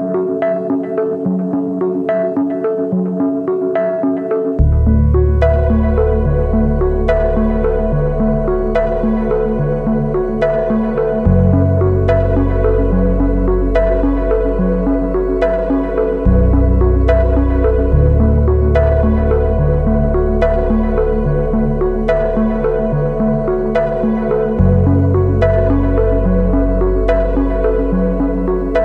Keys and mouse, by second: 0.8 middle click, 1.3 shift+middle click, 1.6 ctrl+s, 1.9 shift+middle click, 3.5 shift+middle click, 8.6-9.0 drag, 9.1 click, 9.2 click, 9.3 middle click, 9.6 middle click, 10.1 click, 11.7 click, 13.3 shift+middle drag, 14.3 ctrl+s, 16.4 Tab, 17.1 shift+middle click, 17.7 middle click, 26.8 middle click, 27.4 middle click, 27.9 click, 28.0 alt+click, 28.6 shift+click.